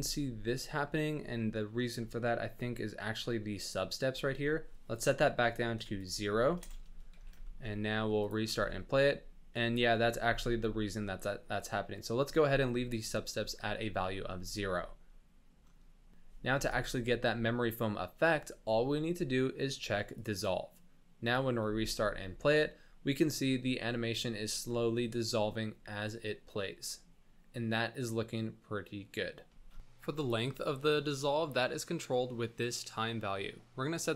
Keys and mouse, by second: 0.1-0.8 drag, 0.1 space, 1.3-1.8 drag, 2.1 shift+middle click, 2.2 click, 4.9-6.0 drag, 6.6 KP_1, 7.2 z, 7.4 shift+click, 8.2 click, 8.5 space, 9.7 shift+click, 11.8 space, 14.0 shift+click, 14.3 space, 21.2 click, 21.6 space, 22.0-23.4 shift+drag, 24.5 shift+middle drag, 24.9-29.4 middle drag, 29.7 space, 32.6-34.1 drag.